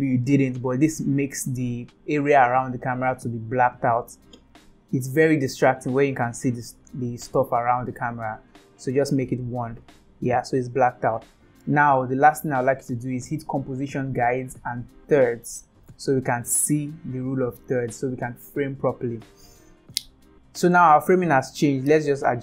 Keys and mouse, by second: 4.4-9.5 drag, 13.6 click, 15.2 click.